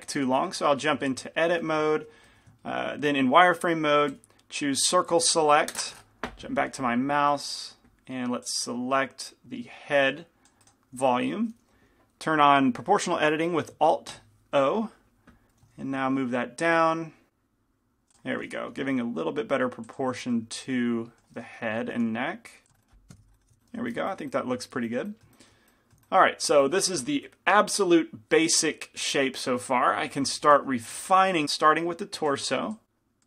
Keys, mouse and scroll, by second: 0.4 KP_3, 0.6 KP_5, 1.5-8.6 middle drag, 1.8 z, 2.4 a, 11.2-15.8 right drag, 15.8 alt+o, 15.8 g, 18.9-22.0 drag, 18.9 g, 20.4-22.6 middle drag, 22.0 g, 22.8 click, 22.8-24.9 middle drag, 23.1 KP_5, 23.2 z, 23.6 Tab, 30.7 g, 30.7 f, 32.4-33.2 drag.